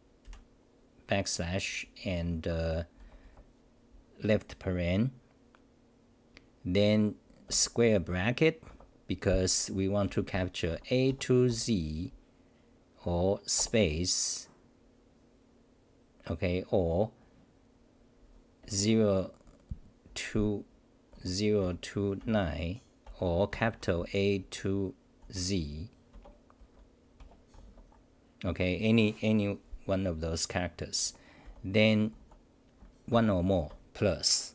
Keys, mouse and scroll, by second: 2.0 ctrl+=, 2.0 Left, 3.0 Left, 3.0 Right, 3.2 Right, 5.6 Delete, 8.6 Left, 20.1 End, 20.8 BackSpace, 21.1 u, 24.4 End, 25.2 u, 27.2 BackSpace, 31.0 Home, 31.5 n, 32.1 u.